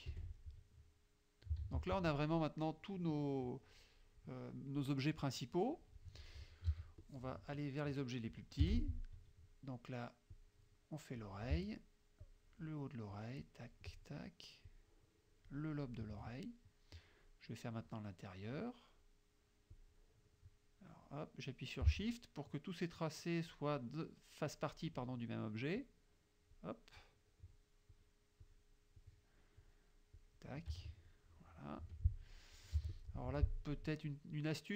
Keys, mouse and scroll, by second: 0.1 F1, 0.6 middle click, 1.2 middle click, 1.7 ctrl+s, 4.9 click, 5.7 click, 6.8 z, 7.1 click, 8.0 click, 8.7 F6, 10.4-11.4 drag, 12.3 shift+click, 13.2 shift+click, 14.8 shift+click, 19.8 click, 25.9 shift+click, 27.1 shift+click, 28.0 shift+click, 28.5 shift+click, 29.1 shift+click, 29.6 shift+click, 30.2 shift+click, 31.9 F2, 32.7 z, 32.9 click, 33.3 F2.